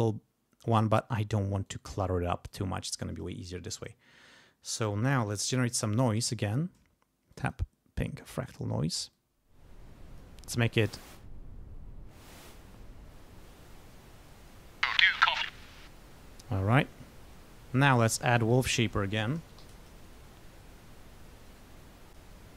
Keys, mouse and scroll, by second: 0.7 click, 1.6 right click, 2.5 click, 4.9-6.7 typing, 7.3 click, 8.2 click, 9.1-10.3 drag, 10.6-14.1 drag, 14.4 click, 14.8 space, 15.5 space, 16.8 click, 17.6 right click, 18.5 click, 18.9-20.1 typing, 21.4 click, 22.1 click.